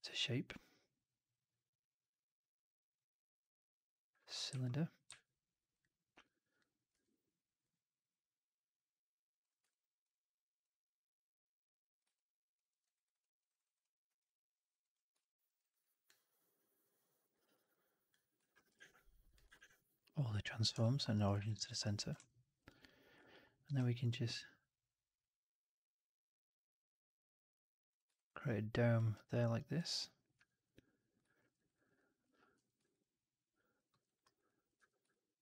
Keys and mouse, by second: 6.0 w, 6.8 r, 9.6-9.9 drag, 12.0-12.5 alt+drag, 12.6 alt+middle drag, 12.7 alt+right drag, 12.9 alt+right click, 13.1 alt+drag, 13.3 alt+right drag, 13.5 alt+right drag, 13.7-14.1 alt+drag, 14.7 click, 15.1 alt+click, 15.3 alt+middle click, 15.5 alt+right click, 15.7 alt+right drag, 15.9-17.1 alt+drag, 17.2 alt+right click, 17.4 alt+right click, 17.6 alt+click, 18.6 shift+Tab, 19.4 shift+Tab, 20.7 alt+middle drag, 21.0 alt+middle drag, 21.2 w, 21.5 alt+middle drag, 21.7 alt+right drag, 21.9 alt+click, 22.0 2, 22.5 click, 23.5 alt+b, 28.0 alt+right click, 28.2 alt+click, 29.0 alt+right click, 29.2 alt+right click, 29.4 alt+right click, 30.2 w, 30.9 click, 31.3 middle click, 31.4 right click, 31.6 right click, 31.8 click, 32.4 4, 32.7 alt+right drag, 32.9 alt+click, 33.8 middle click, 33.9 right click, 34.1 right click, 34.3 click, 34.7 2, 35.0-35.4 alt+drag.